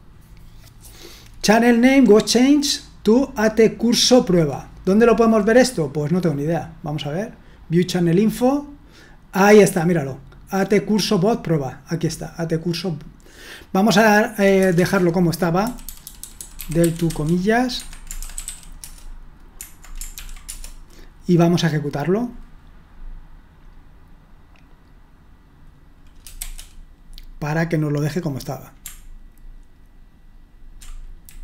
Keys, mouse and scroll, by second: 14.7 Return, 15.4-19.0 typing, 17.8 Escape, 20.2 ctrl+p, 20.3-21.0 typing.